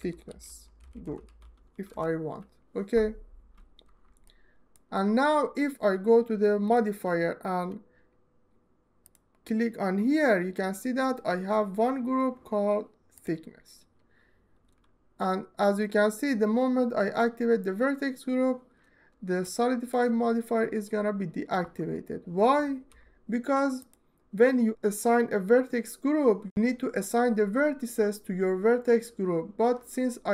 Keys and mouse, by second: 1.4 s, 4.1 alt+shift+middle click, 4.7 middle click, 6.4 click, 8.9-13.1 drag, 19.4 alt+middle click.